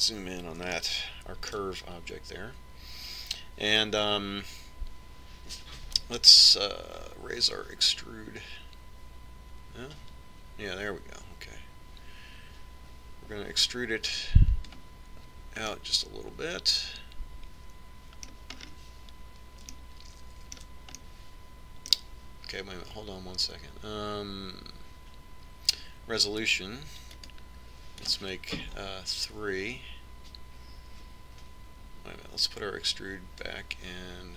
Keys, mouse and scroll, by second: 0.4-4.2 middle drag, 7.8-9.6 drag, 17.2-19.1 middle drag, 20.1-24.3 middle drag, 28.0-31.6 drag, 34.0-34.3 drag.